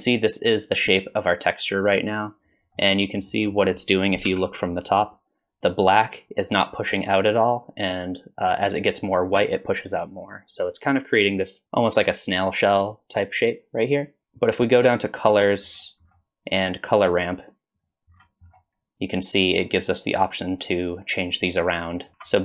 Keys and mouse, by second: 2.8-3.5 middle drag, 4.3 KP_7, 15.4 click, 17.1 click, 17.8 click, 19.6-22.1 drag, 22.1 ctrl+z.